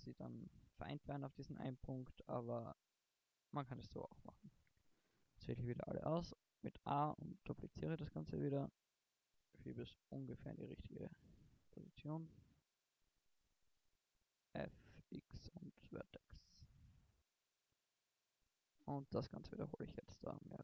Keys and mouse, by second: 0.5 KP_0, 1.1 KP_1, 1.4 middle click, 2.6 Tab, 3.3 Tab, 3.9 a, 4.7 middle click, 5.1 shift+d, 10.7 middle click, 11.3 middle click, 11.9 middle click, 13.1 middle click, 13.5 f, 13.7 right click, 14.7 x, 15.5 right click, 16.8 a, 17.7 shift+d.